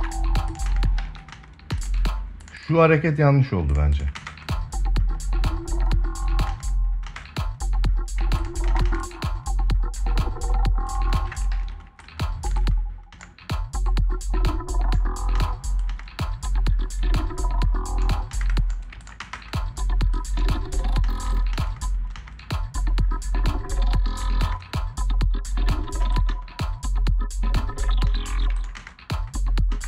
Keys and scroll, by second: 0.4 ctrl+space, 1.1 space, 3.9 space, 6.2 space, 8.4 space, 10.9 space, 15.1 space, 18.0 space, 18.9 space, 20.8 space, 23.9 space, 25.7 space, 27.8 space, 28.5 space.